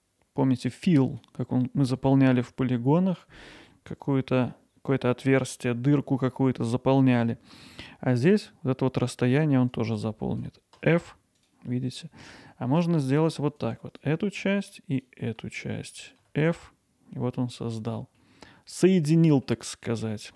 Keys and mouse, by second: 10.8 f, 12.0 middle click, 12.7 middle click, 13.6 click, 14.5 shift+click, 16.2 f, 18.2-19.5 middle drag, 20.0 middle click.